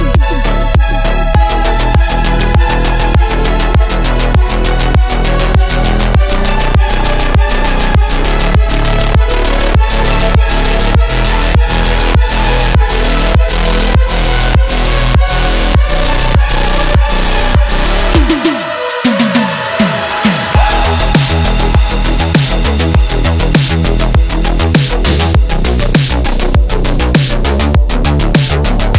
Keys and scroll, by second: 0.5 ctrl+z, 2.0 ctrl+z, 13.0 ctrl+z, 14.2 ctrl+z, 16.8 ctrl+z, 17.3 ctrl+z, 17.9 ctrl+z, 26.7 ctrl+z.